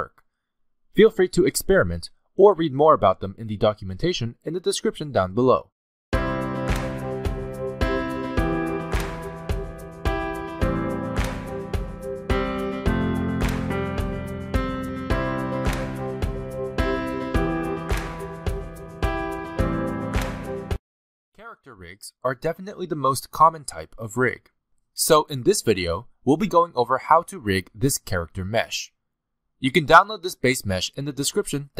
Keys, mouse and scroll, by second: 0.0 scroll down 2, 0.1 middle click, 1.8 scroll up 1, 2.0 s, 3.9 middle click, 4.4 scroll up 2, 4.7 middle click, 5.6 shift+middle click.